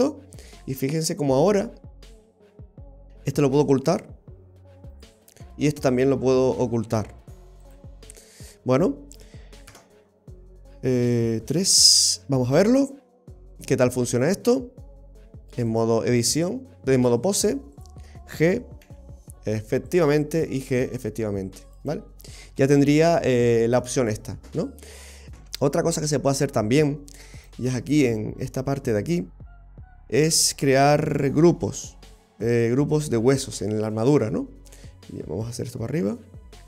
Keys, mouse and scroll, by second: 0.2 scroll up 1, 0.3-0.7 scroll down 2, 0.6 middle click, 3.9 click, 5.0 right click, 7.7 click, 8.3-8.8 scroll down 2, 8.5-9.7 scroll up 4, 9.7 KP_0, 11.5 KP_3, 12.7 scroll up 1, 13.0 shift+middle click, 13.5 middle click, 14.3 right click, 15.8 click, 17.8 right click, 18.9 g, 20.6 right click, 20.8 g, 22.7 ctrl+z, 23.2-25.3 scroll down 5, 25.3 scroll down 1, 25.4 KP_3, 27.4 click, 27.8-28.4 scroll down 7, 29.7-30.3 scroll down 4, 30.3-32.2 scroll up 3, 33.3 click.